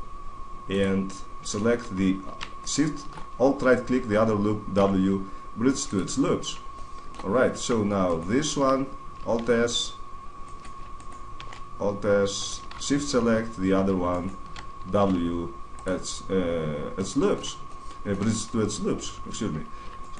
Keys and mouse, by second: 0.7-2.3 drag, 2.3 middle click, 2.7 click, 2.7 right click, 4.5 w, 6.5-7.8 middle drag, 7.8 right click, 9.1 alt+s, 10.3-12.3 right drag, 11.1 alt+s, 12.3 click, 14.3 right click, 14.8 w, 16.7-19.7 middle drag, 19.7 right click.